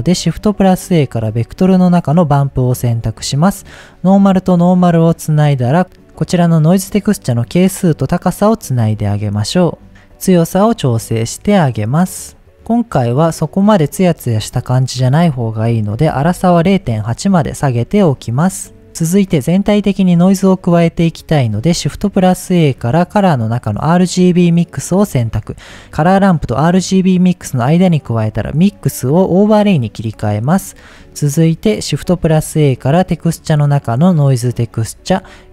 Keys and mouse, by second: 1.8 middle click, 2.5-3.2 drag, 4.2-4.5 drag, 4.7 click, 5.8 click, 6.7-8.1 drag, 9.9-12.5 drag, 12.5-13.0 middle drag, 15.0-17.4 drag, 18.4 click, 20.5-20.8 middle drag, 21.8 shift+a, 27.9-29.6 drag, 32.1 shift+a.